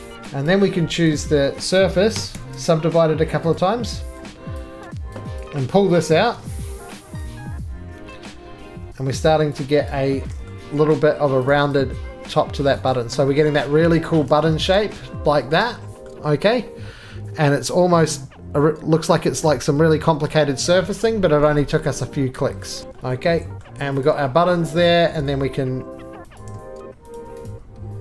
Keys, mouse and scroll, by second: 0.2 click, 0.5 right click, 1.2 click, 2.2 s, 2.3 s, 3.6 click, 4.6 click, 4.6-6.3 typing, 5.4 click, 6.0 middle click, 9.5 click, 9.9 right click, 10.5 middle click, 10.7 scroll, 10.7 2, 11.5 click, 12.1 scroll down 1, 12.7 click, 12.9 right click, 13.1-13.9 scroll down 8, 14.2 middle click, 14.3-15.6 shift+scroll down 8, 15.6 shift+middle click, 16.1 middle click, 16.3-17.6 scroll down 5, 17.6 scroll down 1, 17.7 scroll, 20.0 middle click, 20.2-22.8 scroll, 22.1 middle click, 22.8 Escape, 22.8 click, 22.8 right click, 22.9-23.5 scroll, 23.6 middle click, 23.8 scroll, 24.1 click, 24.3-26.4 scroll, 24.8 middle click, 25.2 2, 26.4 click, 27.2 shift+click, 27.5 shift+click.